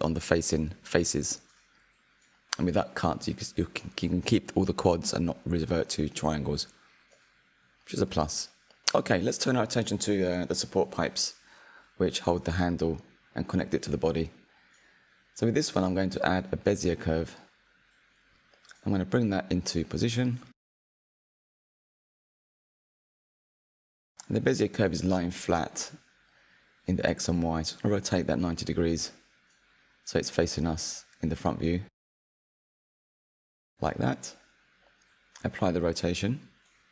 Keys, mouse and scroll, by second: 0.9 click, 1.4-1.7 scroll down 4, 1.7-4.2 middle drag, 4.2-5.1 scroll up 2, 5.1-7.9 middle drag, 7.9 KP_1, 8.5-11.1 scroll up 3, 11.1-11.6 scroll down 4, 11.6-13.7 shift+middle drag, 13.7 shift+a, 19.1 click, 22.9 click, 23.8 click, 24.0 click, 24.5-27.5 middle drag, 27.6-29.0 drag, 32.3-33.7 middle drag, 33.7 KP_1, 35.2 ctrl+a.